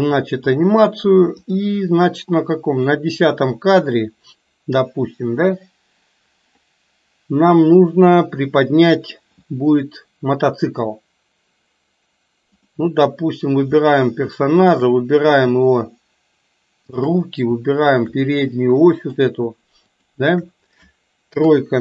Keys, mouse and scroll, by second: 1.5 click, 3.0 drag, 12.5 click, 16.8 shift+click, 18.0 shift+click, 18.7-19.4 middle drag, 19.9 shift+click, 21.5 KP_3.